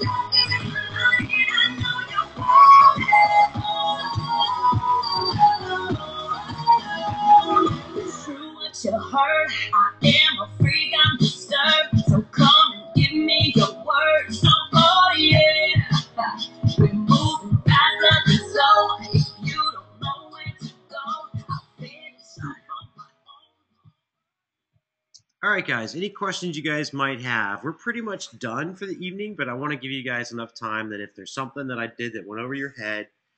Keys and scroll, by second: 24.9 space.